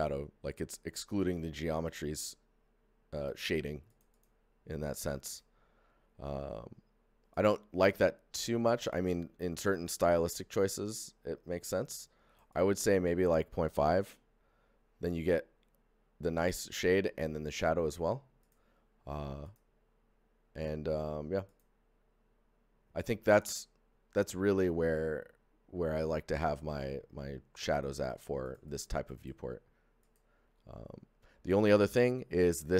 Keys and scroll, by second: 13.9 KP_5, 14.0 Return.